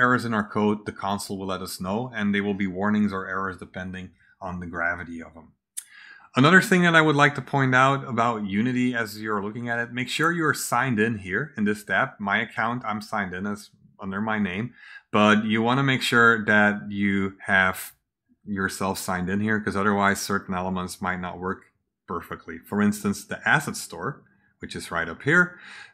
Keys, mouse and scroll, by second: 10.5 click, 14.3 click, 22.9 click, 24.9 click.